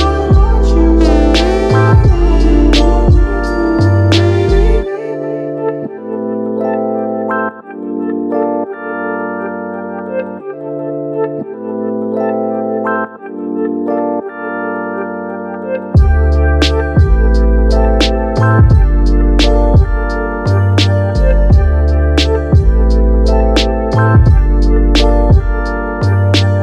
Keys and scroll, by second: 8.9 super+s, 9.8 Right, 9.9 shift+-, 10.2 2, 10.7 Return.